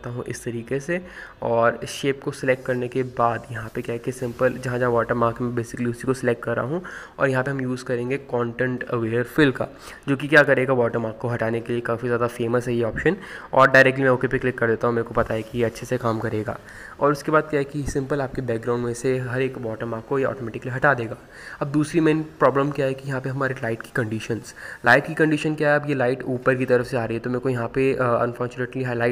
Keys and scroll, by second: 5.4 ctrl+z, 6.2 ctrl+KP_0, 27.2 [, 27.3 x, 27.6 x, 27.8 ctrl+z, 28.6 ctrl+z, 28.8 ctrl+z.